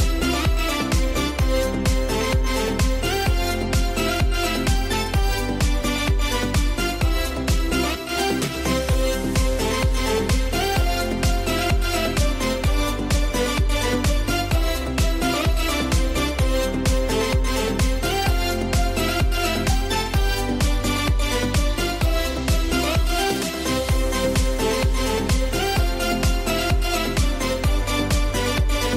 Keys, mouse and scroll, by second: 0.0-0.1 typing, 0.9 alt+click, 1.4-3.4 typing, 3.6 click, 4.5-6.2 typing, 5.6 click, 6.5 click, 7.1 scroll down 1, 9.7 scroll up 1, 12.5 scroll up 1, 14.3-16.8 typing, 14.6 alt+click, 16.5 click, 18.0 [, 18.1 scroll down 1, 18.4 [, 18.8-19.3 scroll up 1, 19.7-21.3 alt+drag, 21.3 alt+click, 22.5 scroll down 1, 23.0-23.8 scroll up 1, 24.4-26.1 alt+drag, 26.9 scroll down 1, 28.0-28.8 scroll up 1.